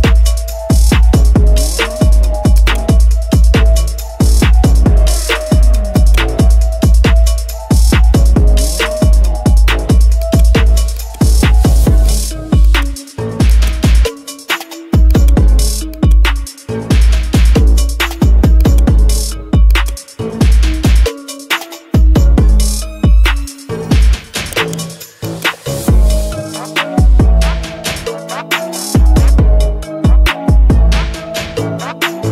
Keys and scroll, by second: 7.5 ctrl+j.